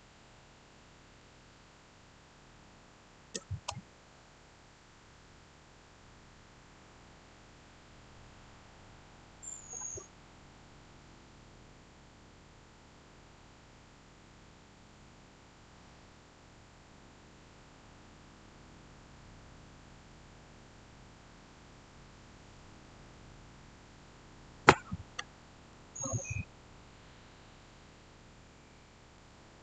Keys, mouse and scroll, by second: 1.1-5.8 shift+middle drag, 25.6 shift+middle click, 25.7 shift+scroll down 1, 27.5-29.6 shift+middle drag.